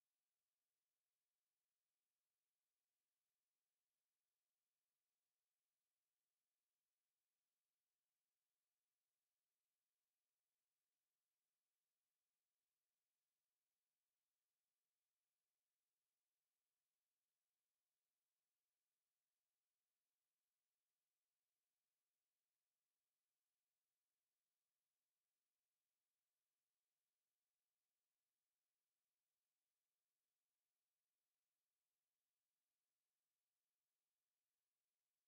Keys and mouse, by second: 0.9 click, 1.4 alt+click, 2.1 alt+middle click, 2.6 shift+click, 2.8 shift+click, 3.1 shift+right click, 4.7 alt+right click, 4.8 alt+right click, 5.7 ctrl+click, 5.8 ctrl+click, 6.1 ctrl+click, 8.6 click, 9.0 alt+right click, 9.4 alt+click, 9.7 alt+right click, 10.1 right click, 11.2 click, 11.7 shift+click, 12.0 shift+right click, 13.2 shift+right click, 13.9 right click, 14.2 alt+middle click, 15.1 click, 15.5 shift+click, 16.7 g, 17.3 alt+click, 18.8 click, 19.4 shift+click, 20.5 g, 21.4 click, 21.5 click, 21.8 shift+click, 23.0 g, 23.8 alt+click, 25.5 alt+right click, 26.0 alt+click, 26.3 right click, 26.8 click, 27.3 alt+click, 28.5 ctrl+shift+h, 29.1 alt+click, 30.1 alt+middle click, 30.6 alt+click, 30.8 alt+click, 31.3 alt+right click, 31.8 alt+click, 32.7 alt+click, 33.0 right click, 34.9 click.